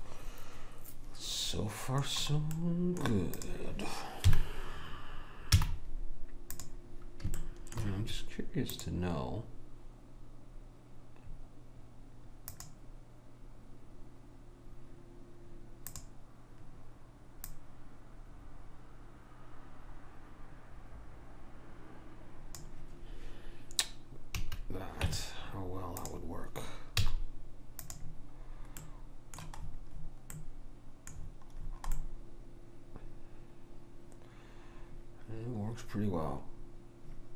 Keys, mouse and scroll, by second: 2.6-4.3 middle drag, 3.4 click, 4.3 KP_1, 5.6 z, 7.4-10.4 middle drag, 8.8 click, 15.9-19.3 drag, 24.4 a, 25.1 Tab, 27.1 z, 28.8-33.9 middle drag.